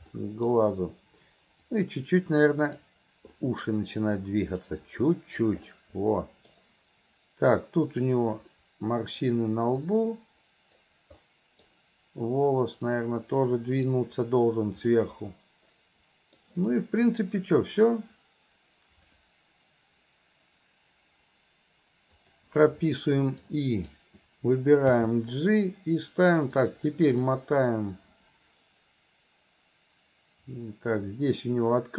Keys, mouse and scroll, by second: 0.2 middle click, 1.7-2.9 drag, 3.5 middle click, 4.7 click, 5.7 middle click, 8.1-9.2 drag, 9.9 click, 11.2 middle click, 13.0 click, 15.0-16.0 middle drag, 16.2 middle click, 22.3 click, 23.5 click, 27.3-31.9 drag.